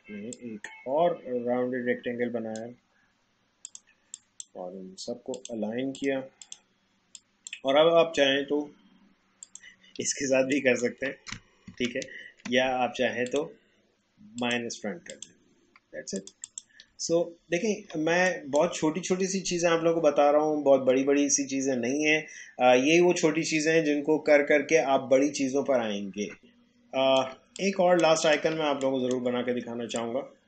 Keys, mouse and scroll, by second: 10.5 alt+click, 11.8 ctrl+z, 13.3 click, 17.1 alt+scroll down 1, 18.1 space, 18.3 click, 18.6 space, 26.4 alt+shift+click, 27.5 click, 28.6 space, 28.8 click, 29.1 space, 30.0-30.4 drag.